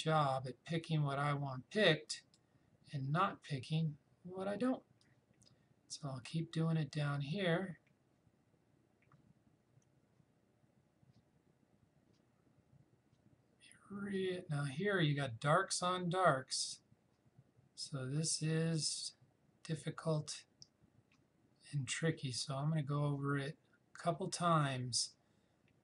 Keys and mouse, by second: 5.0-15.0 drag.